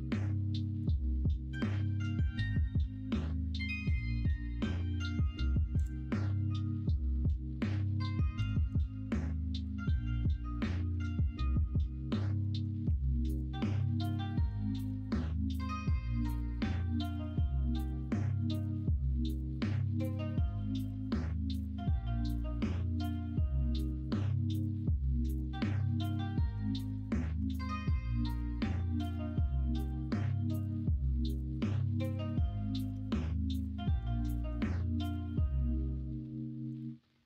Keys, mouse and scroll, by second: 0.6 middle click, 9.9 middle click, 10.5 middle click, 10.9 q, 12.4 middle click, 12.8 q, 14.3 middle click, 14.9 middle click, 17.9 middle click, 18.2 alt+z, 20.5-23.6 middle drag, 23.8-25.4 middle drag, 25.8 middle click, 26.5 Tab, 27.4 Tab, 27.6 middle click, 29.0 3, 29.3 middle click, 29.7 alt+z, 30.0 middle click, 30.9 ctrl+r, 31.9 middle click, 32.2 3, 32.8 alt+click, 33.1 x, 33.9-35.3 drag, 35.3-37.2 right drag.